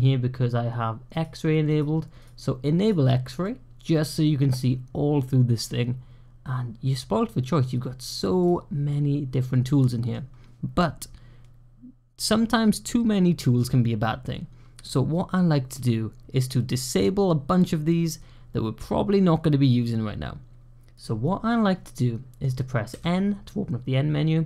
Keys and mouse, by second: 1.0 click, 2.1 click, 2.7 click, 3.3-8.0 middle drag, 8.8-10.0 middle drag, 9.4 click, 21.7-22.3 middle drag, 22.8 n.